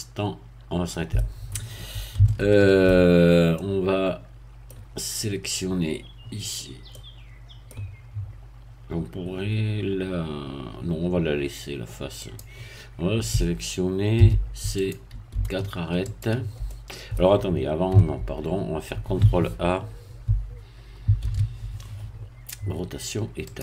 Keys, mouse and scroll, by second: 2.3 shift+middle click, 3.2-3.5 shift+scroll up 1, 3.5-4.9 middle drag, 6.9 middle click, 12.2 click, 14.1 a, 14.8 click, 16.1 shift+click, 16.7 shift+middle click, 17.9 Tab, 21.2 ctrl+a, 23.5 click.